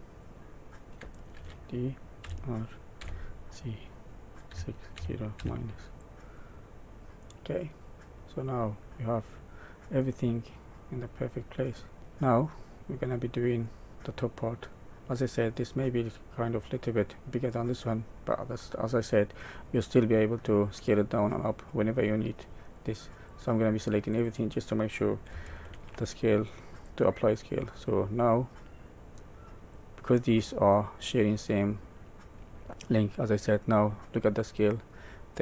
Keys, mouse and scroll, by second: 1.3 alt+d, 6.3 middle click, 8.8 middle click, 10.3 middle click, 11.3-11.8 scroll down 2, 12.0 middle click, 12.1 scroll up 1, 13.0 middle click, 13.6-14.8 scroll down 1, 14.8 middle click, 15.8 scroll down 1, 17.2 middle click, 19.7 middle click, 23.2 click, 25.6 ctrl+a, 28.8 click, 29.7 click.